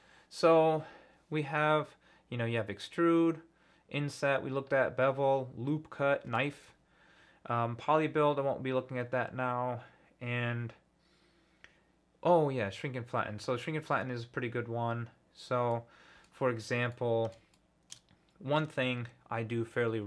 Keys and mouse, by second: 15.7 middle click, 16.9 middle click, 17.7 shift+middle click.